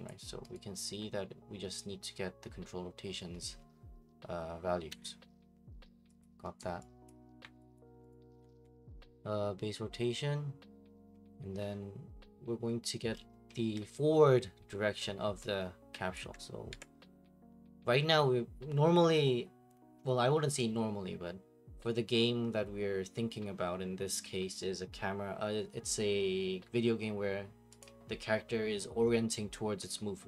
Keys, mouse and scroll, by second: 4.9 Escape, 5.3 middle click, 6.2 click, 6.6 right click, 7.2 click, 7.4 Delete, 7.8 click, 8.1 right click, 8.4 scroll, 8.7 Delete, 16.1-18.8 ctrl+drag, 27.8-29.9 drag.